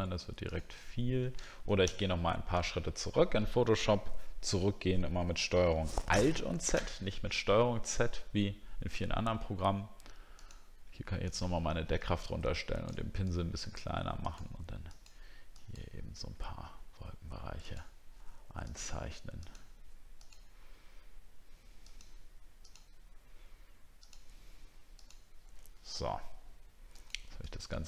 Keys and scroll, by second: 1.8 ctrl+alt+z, 6.1 ctrl+alt+z.